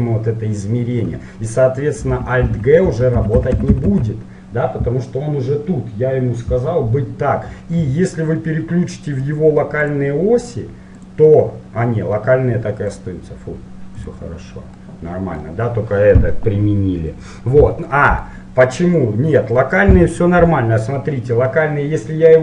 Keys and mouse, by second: 2.5 alt+g, 3.0 alt+g, 7.9-9.7 middle drag, 10.0-11.9 drag, 13.1-14.9 drag, 14.9-16.8 middle drag, 18.0-19.9 middle drag.